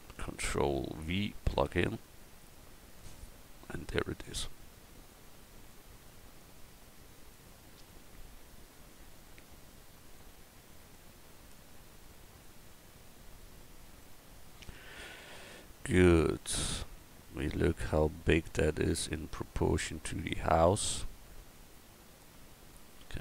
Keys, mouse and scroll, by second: 1.5 ctrl+v, 7.7 click, 8.7-10.1 middle drag, 10.1-12.4 drag, 14.9 middle click, 18.6 middle click, 21.7 middle click.